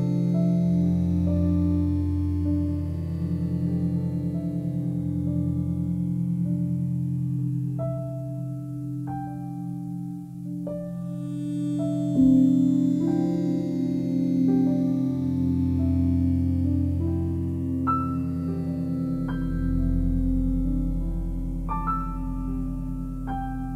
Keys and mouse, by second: 0.1 click, 1.5 Delete, 2.1 click, 2.1 typing, 3.1 click, 3.8 click, 6.2 click, 7.3 click, 8.5 ctrl+alt+click, 9.7 click, 10.8 g, 11.2 z, 12.1 click, 12.5 click, 14.3 g, 15.1 x, 15.6 click, 16.1 click, 17.0 g, 17.4 x, 18.7 click, 19.4 click, 21.1 e.